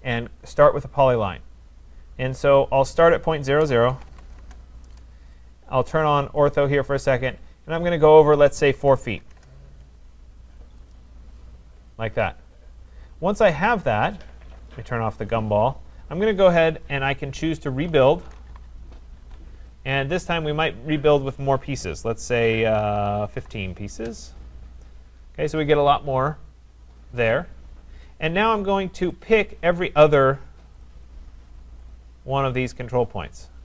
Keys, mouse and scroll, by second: 0.6 click, 3.4-6.1 typing, 3.6 click, 6.5 click, 8.6-9.3 typing, 10.9 click, 11.7 Return, 13.5 click, 15.3 click, 17.6-19.1 typing, 21.2 click, 23.1-24.1 typing, 27.5 scroll, 29.2 click, 30.8 shift+click, 31.9 click, 32.8 click.